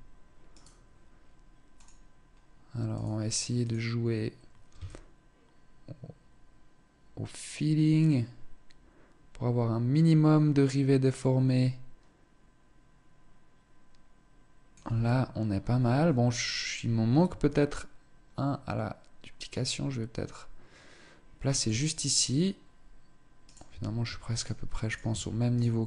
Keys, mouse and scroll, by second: 0.1 right click, 1.4 click, 2.5 click, 3.2 click, 4.4 shift+click, 17.0 shift+click, 23.0 right click, 23.4 Tab, 23.6 Tab, 24.0 right click, 24.4 right click, 24.6 Tab, 25.1 right click, 25.6 right click.